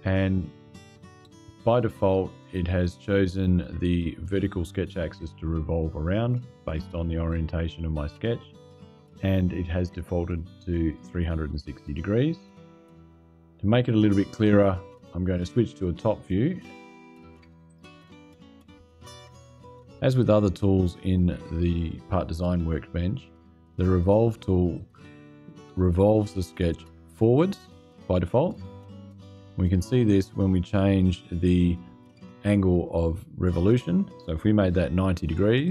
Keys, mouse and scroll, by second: 17.4 click, 29.8-31.0 drag, 35.3 KP_9.